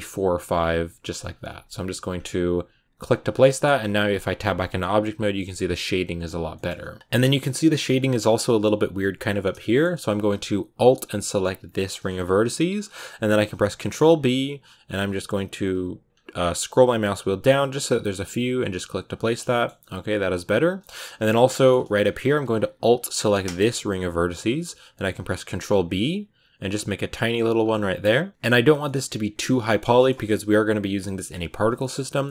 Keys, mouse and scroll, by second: 3.2 scroll down 4, 3.4 shift+middle click, 3.6 scroll up 2, 3.8 Tab, 4.6 middle click, 4.7 scroll up 1, 6.4 middle click, 6.8 Tab, 7.0 ctrl+z, 7.1 a, 7.6 middle click, 8.1-8.7 scroll down 2, 8.7-9.5 scroll up 2, 9.5-11.5 shift+middle drag, 11.5-13.2 alt+right drag, 13.2 ctrl+b, 18.6 Tab, 18.7-19.1 scroll down 6, 19.1-20.3 shift+middle drag, 20.3 Tab, 20.6 shift+middle click, 20.8-21.3 scroll up 5, 21.3 shift+middle click, 21.6-23.0 scroll up 1, 23.0-25.0 alt+right drag, 25.0 ctrl+b, 27.7 scroll down 4, 27.9 middle click, 28.3-28.7 scroll down 2, 28.7 shift+middle click, 29.3 scroll down 2, 29.5-32.3 shift+middle drag.